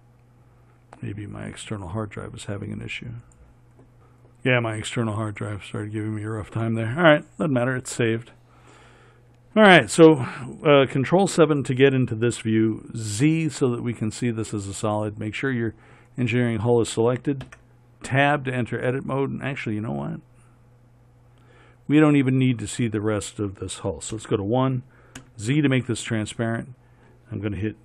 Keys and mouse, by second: 17.8 Tab, 24.5 KP_1, 25.5 z.